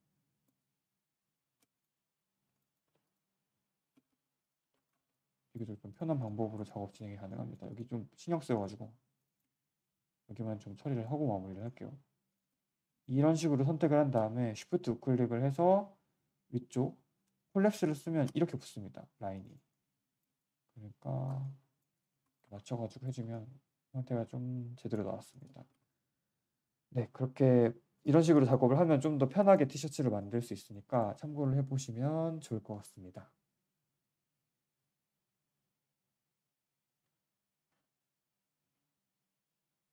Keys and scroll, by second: 2.8 g, 3.9 z, 4.1 z, 4.6 3, 6.5 1, 22.1 3, 30.1 shift+w.